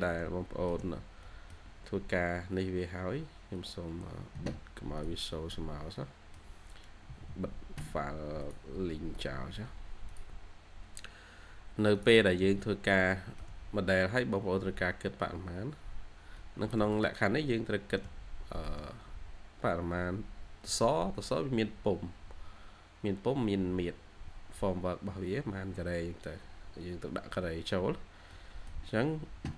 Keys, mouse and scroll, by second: 0.8 middle click, 0.8 scroll down 1, 5.8 middle click, 7.0 typing, 12.2 middle click, 13.3 shift+scroll, 13.3 shift+scroll down 1, 14.0 scroll up 1, 15.6 scroll up 1, 15.7 scroll down 1, 16.3 middle click, 17.6 scroll down 1, 19.8 scroll up 1, 21.3 scroll up 1, 27.3-27.6 scroll down 1, 28.2 middle click.